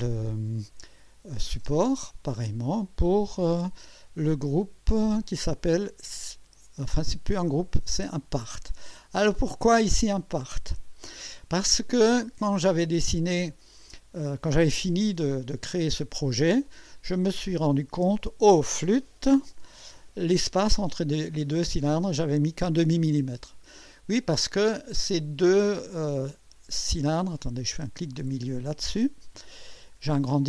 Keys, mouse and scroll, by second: 0.9 click, 1.5 space, 5.2 click, 6.0 space, 9.0 scroll down 1, 9.7 click, 10.4-11.4 drag, 11.9 scroll up 1, 12.6-13.6 right drag, 14.3-15.7 drag, 15.9 scroll up 1, 16.7-17.6 drag, 19.5 KP_6, 20.2 scroll up 1, 20.7-21.5 right drag, 21.6 scroll up 1, 23.5-24.2 scroll down 3, 25.3 scroll down 1, 25.8-26.6 right drag, 29.0 middle click, 30.0-30.3 scroll up 1.